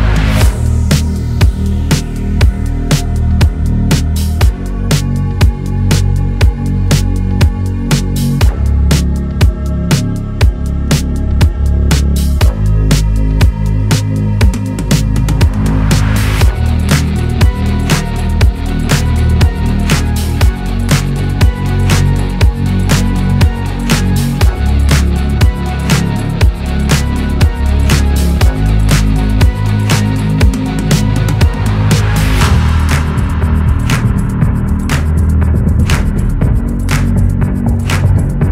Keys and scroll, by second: 14.1 Escape, 20.6 ctrl+shift+c, 22.8 1, 26.1 ctrl+d, 27.7 2, 28.1 ctrl+d, 28.6 ctrl+d, 31.5 3, 32.1 4, 37.6 ctrl+shift+c.